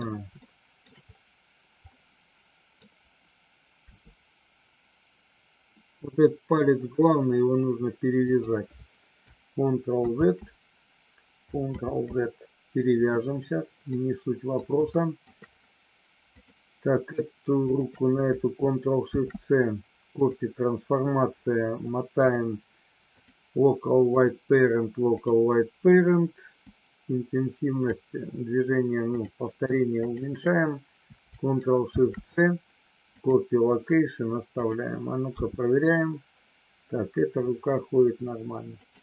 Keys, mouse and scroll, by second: 0.4 shift+middle click, 1.9 middle click, 3.9 r, 8.3 click, 10.1 ctrl+z, 11.8 ctrl+z, 13.9 middle click, 14.9 shift+middle click, 16.4 click, 17.5 shift+click, 19.0 ctrl+shift+c, 22.1-23.3 drag, 24.0-25.3 drag, 26.8-27.9 drag, 29.1 click, 30.0 shift+click, 31.8 ctrl+shift+c, 35.3 g, 38.8 click.